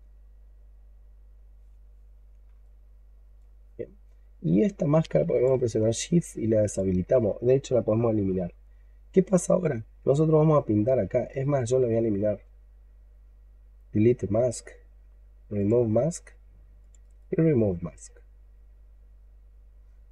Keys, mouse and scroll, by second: 0.8 scroll up 2, 1.1-1.7 scroll down 2, 2.5 alt+click, 3.6-5.0 scroll up 1, 5.2 shift+click, 6.5 shift+click, 7.8-8.2 scroll up 1, 8.2-10.0 scroll down 2, 16.9 right click.